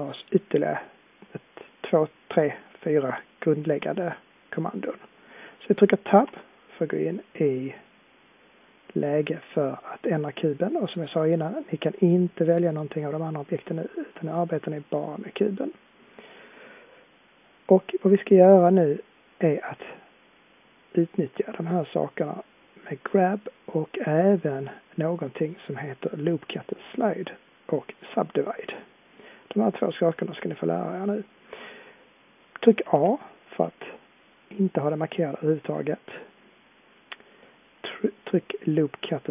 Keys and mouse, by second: 6.2 Tab, 7.7-8.8 drag, 16.6-18.9 middle drag, 19.6-21.9 middle drag, 24.5-27.2 drag, 32.9 a.